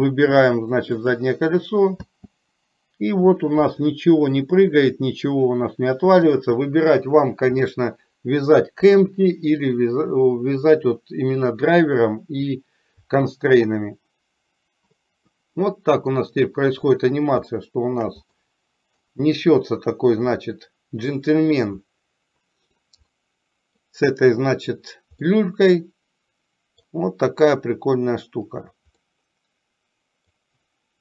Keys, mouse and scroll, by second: 2.4 space, 4.0-5.2 middle drag, 15.5 middle click, 17.7 shift+middle click, 18.6 middle click, 20.6 middle click, 23.4 middle click, 25.5-27.1 middle drag, 29.2-30.5 middle drag.